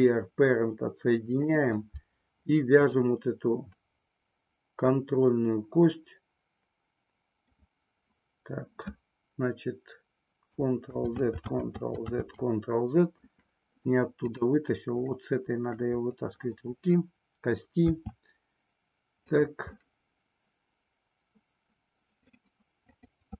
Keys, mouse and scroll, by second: 2.9-7.6 middle drag, 10.8 ctrl+z, 11.4 ctrl+z, 15.2 middle click, 17.8 e, 19.3 click, 19.7-22.4 middle drag, 22.9 click.